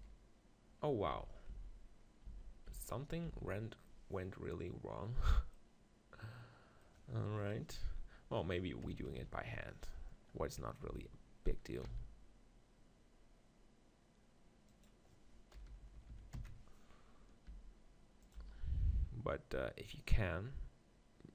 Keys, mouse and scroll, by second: 0.0 KP_1, 1.1 ctrl+z, 1.5 ctrl+z, 2.3 ctrl+z, 2.7 ctrl+z, 3.3 ctrl+z, 7.4 KP_3, 7.8 z, 8.8 KP_4, 9.0 KP_4, 10.6 click, 10.9 r, 11.9 r, 14.8-16.6 drag, 15.5 KP_4, 15.7 KP_4, 17.5 r, 18.3-20.2 drag, 18.5 g.